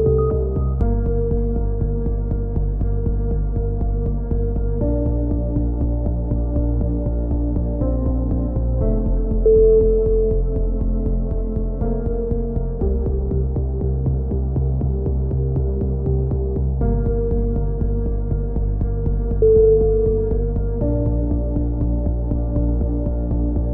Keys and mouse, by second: 0.3 c, 1.2-2.3 drag, 1.5 s, 4.1 a, 4.7 ctrl+r, 5.8 a, 6.0 z, 6.4 z, 6.8 z, 7.1-8.2 drag, 9.2 KP_7, 9.5 click, 9.7 z, 12.5 b, 13.3 e, 14.1 click, 14.4 click, 15.8-17.3 middle drag, 17.8 middle click, 18.3 KP_7, 18.9-20.0 drag, 20.0 middle click, 20.3 click, 21.1 s.